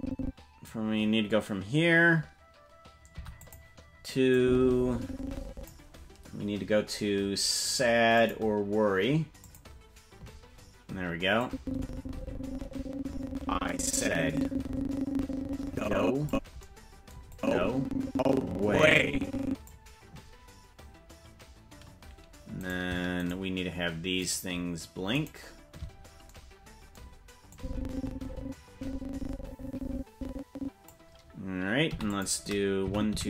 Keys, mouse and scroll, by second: 3.1 i, 4.3-5.7 drag, 8.2 click, 9.4 click, 11.4-16.3 drag, 17.3-19.7 drag, 22.8 right click, 23.4 shift+right click, 25.7 shift+right click, 27.5-30.9 drag, 31.8 i, 32.9 Right, 33.1 Right.